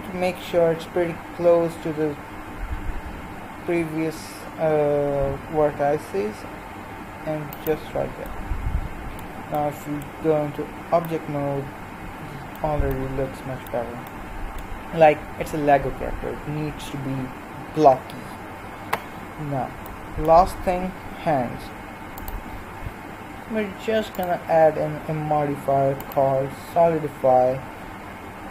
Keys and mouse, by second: 8.4-10.3 middle drag, 10.3 Tab, 13.9-25.7 middle drag, 25.7 click.